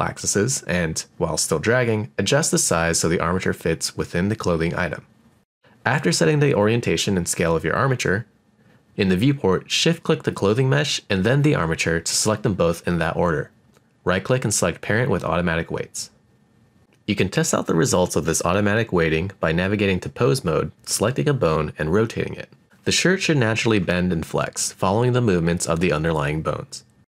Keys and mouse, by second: 1.0-4.6 drag, 4.9 click, 6.4-7.9 middle drag, 8.2-8.8 shift+middle drag, 9.3 click, 9.8 shift+click, 10.8-13.8 right drag, 16.5-17.7 drag, 18.8 r, 19.8 right click, 20.0 middle click, 20.6 click, 20.8 r, 22.4 right drag, 22.5 middle drag, 23.1 r, 23.6 right click, 24.4 click, 24.7 middle drag, 25.1 click, 25.3 r, 27.1 click.